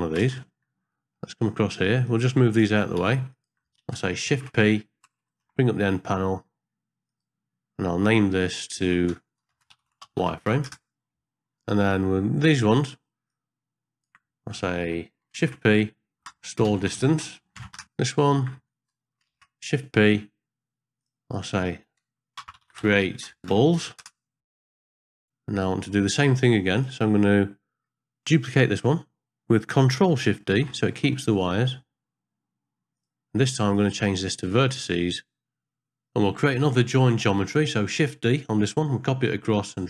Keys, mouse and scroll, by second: 0.2 ctrl+space, 0.9 middle click, 2.0 click, 3.0 g, 4.4 shift+p, 5.4 n, 7.1 click, 8.4-10.7 drag, 13.2-14.1 drag, 15.5 shift+p, 16.2-17.8 drag, 19.4 shift+p, 21.0 click, 21.3-24.0 drag, 24.5 click, 24.7 click, 25.0 click, 26.7 click, 30.4 ctrl+shift+d, 33.7-34.8 drag, 35.8 click, 36.9 click, 38.3 shift+d.